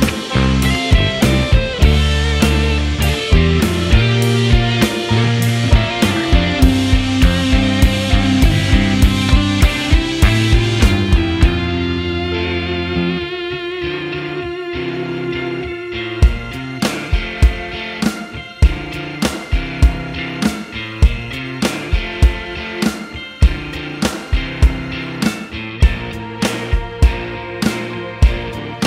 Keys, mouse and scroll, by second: 0.1 scroll up 2, 0.2 scroll down 1, 0.2 middle click, 0.6 shift+middle click, 0.7 scroll up 2, 0.7 shift+middle click, 0.8 scroll down 1, 0.8 middle click, 1.5 Tab, 1.7 middle click, 1.9 click, 2.0 l, 2.4 middle click, 2.6 h, 2.7 middle click, 2.8 scroll up 1, 2.9 shift+middle click, 3.5 alt+click, 3.6 middle click, 4.1 shift+middle click, 4.4 click, 4.7 middle click, 4.8 KP_1, 4.9 shift+middle click, 5.0 s, 5.4 p, 5.6 Tab, 5.8 click, 6.0 Tab, 6.1 click, 6.6 middle click, 6.6 scroll down 1, 6.8 middle click, 6.8 scroll up 2, 6.9 shift+middle click, 7.0 click, 7.4 shift+middle click, 7.6 scroll up 1, 7.6 shift+middle click, 7.8 s, 8.1 middle click, 8.5 s, 8.9 ctrl+r, 9.2 ctrl+x, 9.3 ctrl+r, 9.5 middle click, 10.3 scroll up 1, 10.4 middle click, 10.5 ctrl+z, 10.6 middle click, 11.0 ctrl+z, 11.2 ctrl+r, 11.4 middle click, 12.0 click, 12.4 s, 13.2 middle click, 13.5 click, 13.7 ctrl+z, 13.8 ctrl+r, 14.5 click, 14.7 r, 15.5 ctrl+r, 16.2 click, 16.5 ctrl+r, 16.7 click, 16.8 middle click, 17.3 click, 17.5 middle click, 17.6 scroll down 1, 17.6 middle click, 17.8 scroll up 1, 17.9 middle click, 17.9 scroll down 1, 18.0 middle click, 18.3 alt+shift+click, 18.6 middle click, 18.7 alt+shift+click, 18.9 middle click, 19.1 middle click, 19.3 alt+shift+click, 19.3 middle click, 19.4 scroll up 2, 19.5 scroll down 1, 19.5 middle click, 19.9 click, 20.0 middle click, 20.2 shift+click, 21.0 shift+click, 21.5 shift+click, 22.1 alt+click, 22.2 alt+shift+click, 22.8 shift+click, 23.2 ctrl+e, 23.4 middle click, 23.5 scroll down 1, 23.6 middle click, 23.7 KP_1, 23.8 shift+middle click, 24.5 scroll down 1, 25.0 click, 25.5 click, 26.2 click, 26.7 click, 27.1 click, 27.9 click, 28.5 middle click, 28.6 scroll down 1, 28.7 middle click.